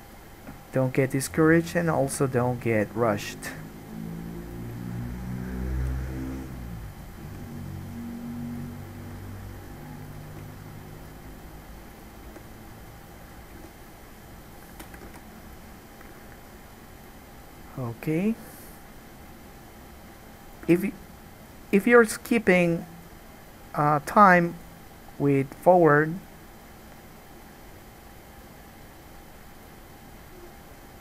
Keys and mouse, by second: 2.3 g, 5.9-12.7 right drag, 5.9 g, 7.1 click, 7.1 middle click, 7.5 g, 9.2 g, 10.3 click, 10.3 middle click, 10.5 g, 12.1 click, 12.1 middle click, 12.5 g, 12.7-24.0 drag, 13.5 middle click, 13.5 right click, 13.8 g, 15.4 alt+a, 18.0-21.3 middle drag, 18.0-21.3 right drag, 21.8-23.2 middle drag, 21.8-23.2 right drag, 26.4 click, 28.2 click, 28.8 click, 30.4 click, 30.9 click.